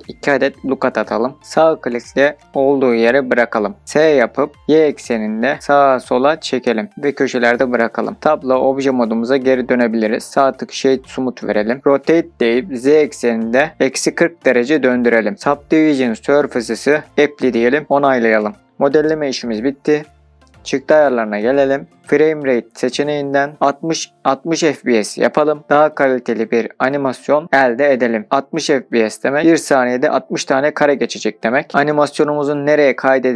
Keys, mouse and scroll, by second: 1.4 right click, 2.5 s, 4.5 y, 8.2 click, 8.2 Tab, 9.2-9.7 middle drag, 10.0 right click, 11.9 r, 12.9 z, 13.7 KP_Subtract, 14.1 KP_4, 14.4 KP_0, 15.2 KP_Enter, 16.8-17.5 drag, 18.1 click, 25.7 middle click, 30.1-30.4 drag.